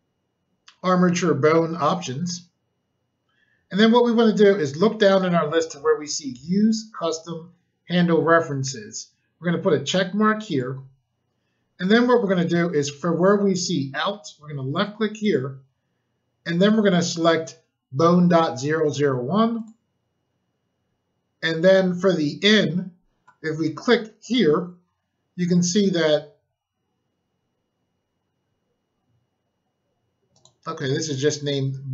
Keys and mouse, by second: 10.4 click, 15.2 click, 19.5 click, 24.2 click, 30.3 click.